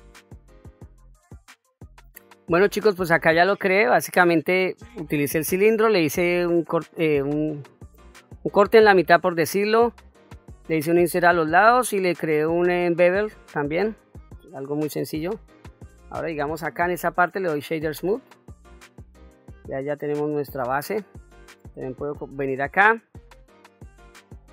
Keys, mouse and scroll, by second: 0.0 scroll up 2, 0.0 scroll down 1, 0.1 middle click, 0.2 middle click, 0.4 KP_1, 0.5 scroll up 1, 0.6-0.9 scroll down 1, 0.9 Tab, 3.8 Tab, 10.0 middle click, 11.4 middle click, 13.3 middle click, 14.4-14.8 scroll down 1, 14.8 middle click, 15.4-16.1 scroll up 2, 16.1 Tab, 16.6 middle click, 17.3 right click, 18.7-19.1 scroll down 1, 19.1-20.5 middle drag, 21.0-21.3 scroll up 1, 21.3-21.6 middle drag, 22.5-24.5 drag.